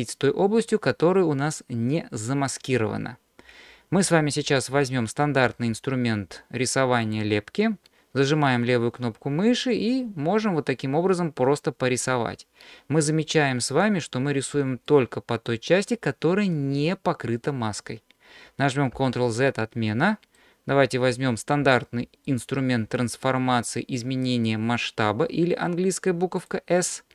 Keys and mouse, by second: 9.5-14.5 drag, 14.9 middle click, 17.3 middle click, 19.0 ctrl+z, 19.9 middle click, 26.4 click.